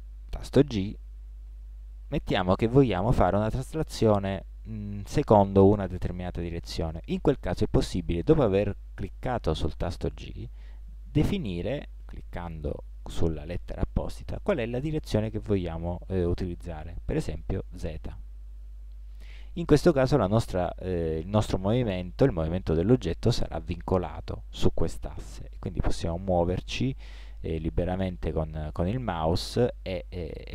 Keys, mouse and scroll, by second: 1.5 g.